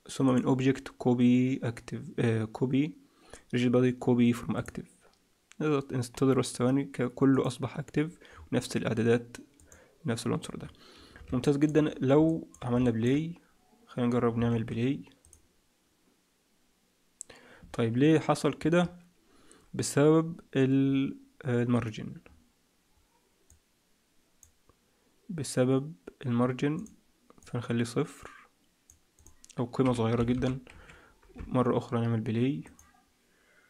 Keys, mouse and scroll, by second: 0.2 click, 7.2 click, 8.2-8.7 scroll down 1, 8.7-9.5 scroll down 5, 9.5 click, 11.3 shift+middle click, 11.7-12.1 scroll down 4, 12.2 middle click, 12.7 shift+middle click, 14.0 scroll down 2, 14.5 ctrl+s, 15.1 click, 18.6 Escape, 20.7-21.6 scroll down 2, 21.6-22.1 scroll down 3, 22.1-22.7 scroll down 2, 23.4 click, 26.7 click, 27.3 click, 29.1 click, 30.3 0, 32.5 click.